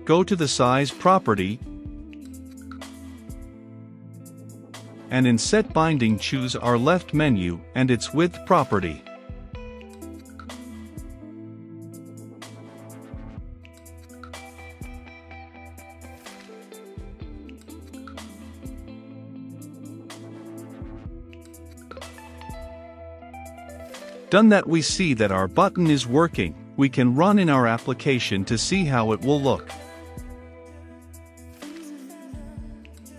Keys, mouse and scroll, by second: 13.1-33.1 drag.